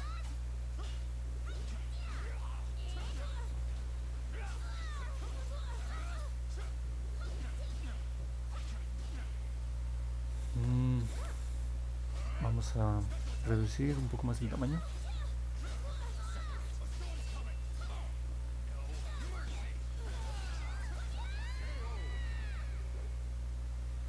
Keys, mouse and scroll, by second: 1.4 click, 2.3 click, 2.7 click, 3.2 click, 4.9 click, 5.3 click, 6.0 click, 6.7 click, 7.0 click, 7.4 click, 8.5 click, 8.8 click, 9.0 click, 16.7 click, 17.1 click, 17.7 click, 19.0 click, 19.4 click, 19.7 click, 19.9 click, 20.2 click, 20.6 click, 21.5 click, 21.7 click.